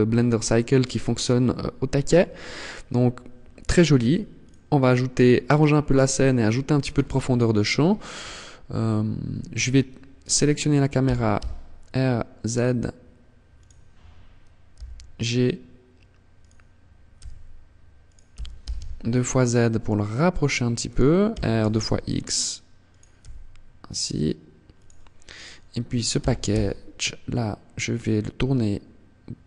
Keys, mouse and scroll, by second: 3.3 click, 6.1 scroll down 2, 9.5 right click, 10.2 r, 12.8 click, 13.8 g, 15.6 click, 16.3 g, 17.2 click, 17.5 g, 20.2 click, 20.4 r, 22.1 click, 22.3 g, 24.0 click, 24.5 right click, 25.6 r, 28.8 click, 29.2 right click.